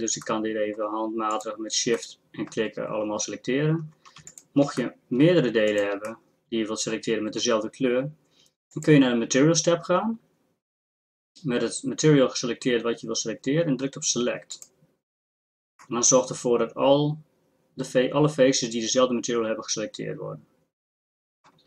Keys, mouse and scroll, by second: 4.3 middle click, 6.3-8.7 drag.